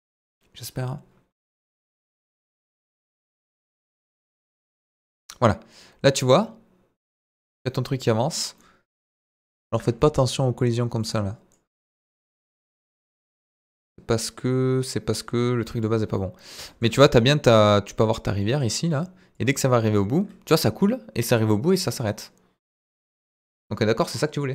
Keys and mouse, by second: 4.4-8.3 drag, 8.5-8.9 middle drag, 9.2 middle drag, 10.0 middle click, 11.0 click, 11.8-15.8 drag, 16.1-16.5 middle drag, 16.9-17.5 middle drag, 17.7 middle drag, 18.4 middle click, 19.3-24.5 drag.